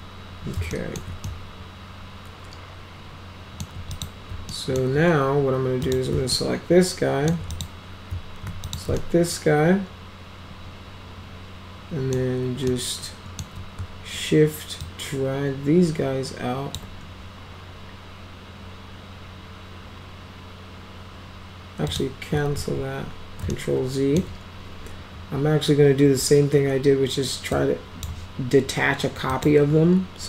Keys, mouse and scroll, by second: 0.7 alt+middle click, 1.3-3.7 alt+middle drag, 3.9 click, 4.5 alt+middle click, 5.9 click, 6.4 alt+middle click, 7.5 click, 8.7 ctrl+click, 9.0-12.1 alt+middle drag, 12.7 alt+middle click, 14.9-16.8 shift+drag, 21.9 click, 22.6 ctrl+z, 23.5-24.2 alt+middle drag, 27.6 click, 29.3 click.